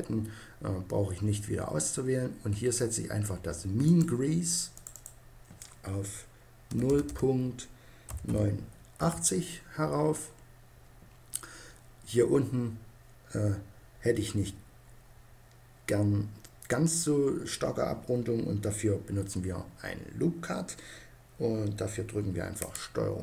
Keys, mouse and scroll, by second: 3.6-6.3 drag, 23.1 ctrl+r.